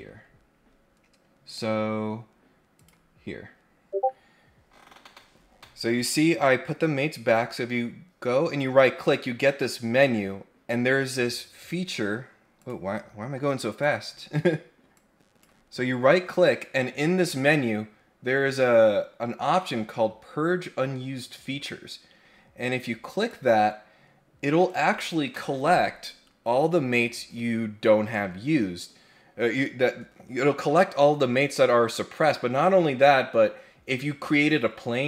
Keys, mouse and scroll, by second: 1.4 click, 2.7 click, 12.6 click, 13.7 click, 14.9 click, 23.1 click, 24.6 click.